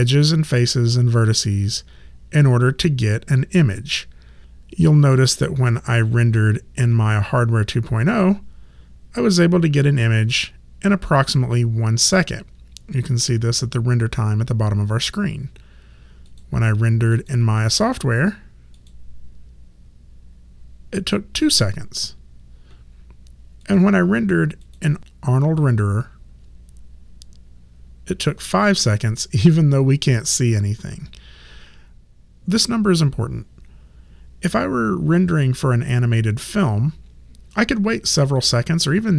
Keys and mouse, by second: 4.4 click, 8.1 click, 16.3 click, 23.6 click.